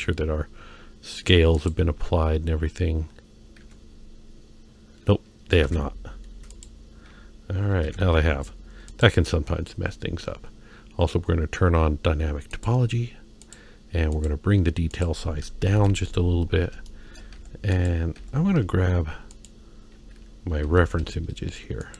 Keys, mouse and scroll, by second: 0.0 ctrl+Tab, 0.0 n, 1.6 click, 3.6 Tab, 5.6 ctrl+a, 7.8 ctrl+Tab, 11.7-12.1 scroll down 1, 12.5-13.5 drag, 14.1-16.3 drag, 16.5-16.9 scroll down 1, 16.9 shift+middle click, 17.4 Tab, 17.7 click, 18.2 Tab, 19.3 click, 20.6 Tab.